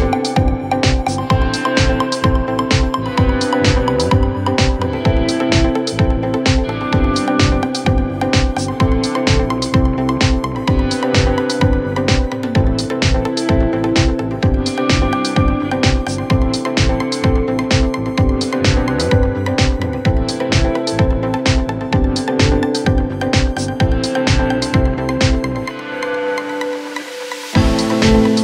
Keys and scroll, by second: 1.7 ctrl+z, 18.8 ctrl+z, 24.2 ctrl+z.